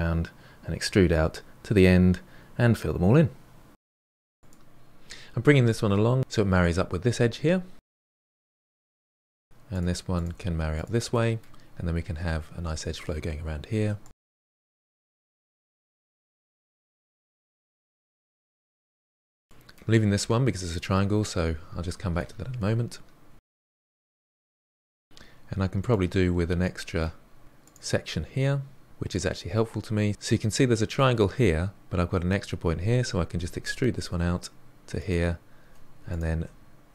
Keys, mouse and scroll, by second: 0.0-2.7 typing, 0.5 middle click, 0.9 ctrl+z, 1.2 middle click, 1.4 click, 1.5 middle click, 1.7 drag, 1.8 middle click, 2.0 middle click, 2.2 middle drag, 2.7-3.2 middle drag, 3.8 scroll up 1, 3.9 click, 4.1 g, 7.8 1, 8.1 click, 8.3 g, 9.2 middle click, 10.0 click, 10.2 g, 10.9 click, 11.0 g, 11.6-13.3 middle drag, 13.3-15.3 typing, 13.5 click, 13.7 middle click, 14.4 middle click, 15.1 middle click, 15.6 middle click, 16.0 click, 16.2 middle click, 16.3 e, 16.6 e, 16.8 e, 17.2 middle click, 18.8 click, 18.9 2, 19.2 f, 19.2 f, 19.4-23.2 middle drag, 23.2 1, 23.4 click, 24.1 middle click, 24.3 e, 24.6 e, 25.0 e, 25.5-25.8 middle drag, 25.8 e, 26.5 middle click, 27.1 e, 28.4-30.1 middle drag, 30.1 click, 33.4 e, 36.0 shift+click.